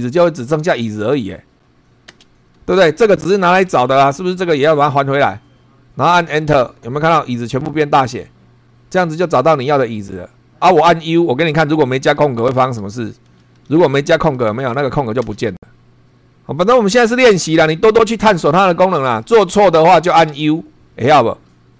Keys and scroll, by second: 2.1 space, 2.6 Left, 3.7 Right, 6.5 Return, 11.5 u, 12.7 shift+;, 13.5 Left, 14.5 BackSpace, 15.2 Return, 20.3 u.